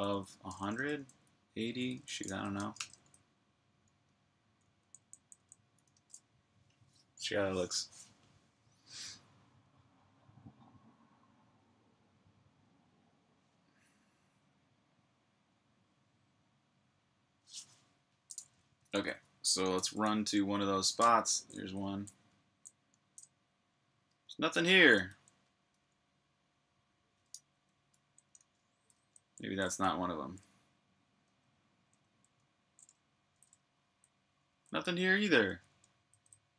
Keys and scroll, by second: 0.0-3.0 typing, 4.3-7.0 typing, 19.0-22.7 typing, 23.9-25.4 typing, 26.9-30.5 typing, 33.2-36.5 typing.